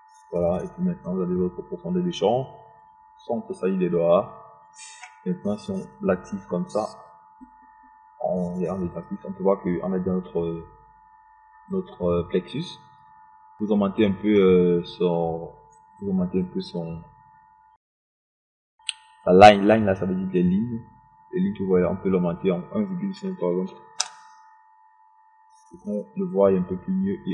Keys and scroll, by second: 24.7 1, 25.0 KP_5, 25.8 Return.